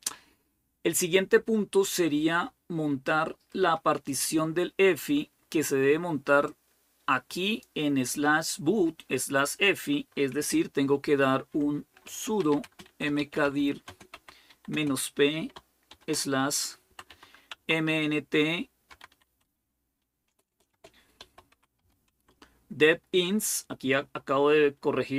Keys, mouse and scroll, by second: 6.3-8.4 drag, 11.8-14.5 typing, 15.7-17.4 typing, 18.5-22.1 typing.